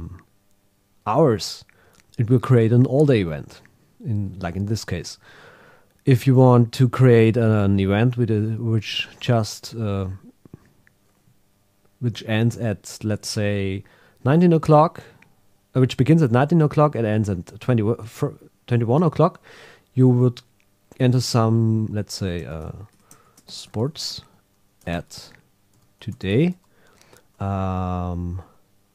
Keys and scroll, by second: 22.5 shift+m, 23.3 shift+s, 24.8 shift+@.